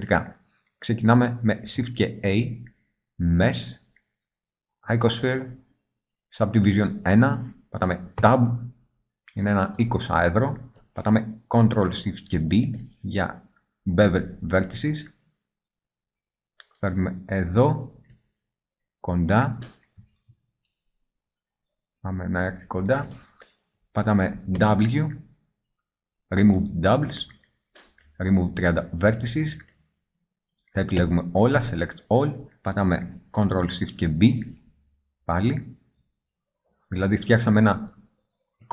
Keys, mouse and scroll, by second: 2.3 shift+a, 8.2 Tab, 12.5 ctrl+shift+b, 16.9-17.3 drag, 17.3-18.7 middle drag, 18.7 click, 18.8 middle click, 18.9 click, 19.0 middle click, 19.0 click, 19.1-20.7 middle drag, 20.7-21.4 drag, 21.4 middle click, 24.6 w, 31.1 a, 31.6 a, 34.1 ctrl+shift+b.